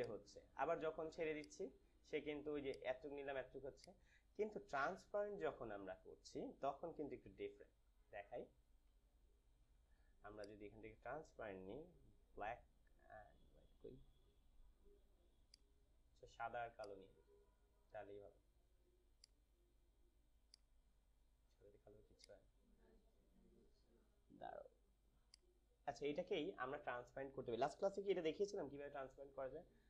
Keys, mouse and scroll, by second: 4.3 typing, 4.9 ctrl+z, 6.9 ctrl+alt+z, 10.3 click, 15.5 click, 15.5 typing, 19.1-22.1 drag, 25.2 click.